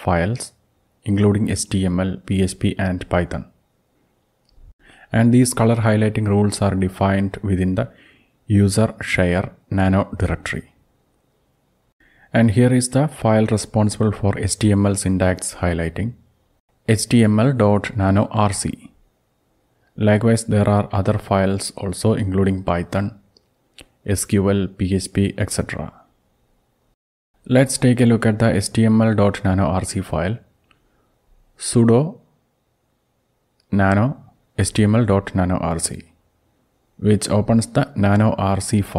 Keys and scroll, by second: 0.2 alt+Up, 3.0 ctrl+x, 4.3-9.5 typing, 10.3 Return, 29.5-30.6 typing, 32.3-33.7 typing, 36.5-38.9 typing.